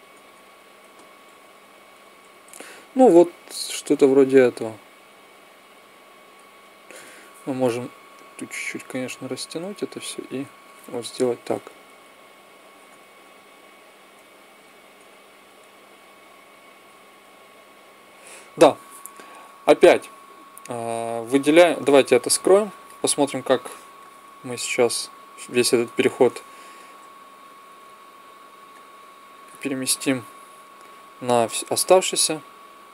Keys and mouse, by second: 0.6 Left, 1.1 Right, 2.3 Left, 5.0 Right, 5.6 Left, 6.2 Right, 11.6 Left, 12.1 Left, 12.7 Right, 14.0 Left, 14.7 Right, 15.3 Left, 16.0 Right, 16.7 Left, 18.0 Right, 22.2-23.4 drag, 23.4-25.5 middle drag, 25.6 click, 26.0-27.6 middle drag, 27.6 b.